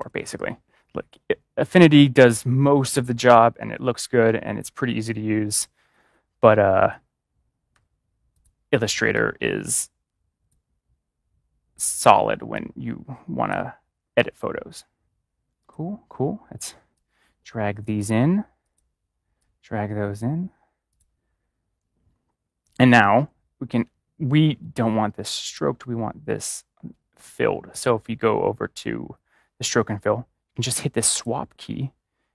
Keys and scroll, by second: 7.6 typing.